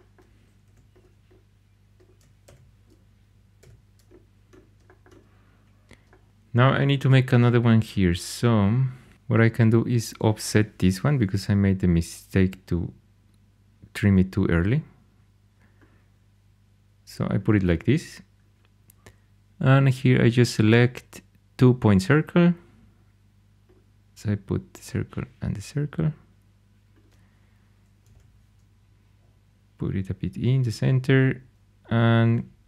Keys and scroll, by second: 0.6 2, 2.4 j, 3.5 h, 10.7 o, 27.7-28.5 typing, 32.2 c.